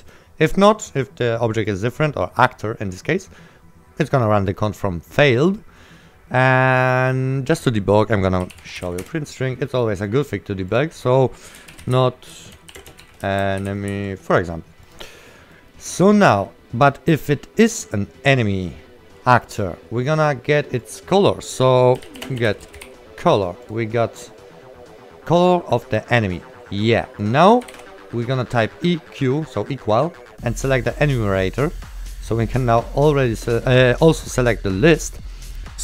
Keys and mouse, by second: 0.0 right click, 0.7 click, 8.5-9.5 typing, 9.8 right click, 10.1 click, 11.6-14.4 typing, 15.0 click, 15.3 right click, 19.2 click, 19.5 right click, 21.0 click, 21.8-23.5 typing, 23.7 click, 25.9 click, 27.5-28.3 typing, 31.3 click, 34.9 right click.